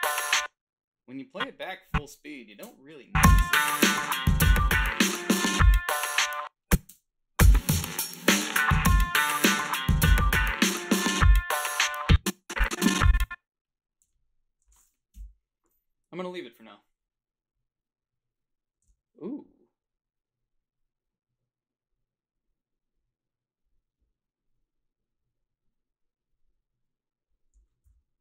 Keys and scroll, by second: 0.1 space, 2.6 space, 6.2 space, 6.9 space, 11.9 space, 14.1 g, 15.2 Delete, 18.8 f.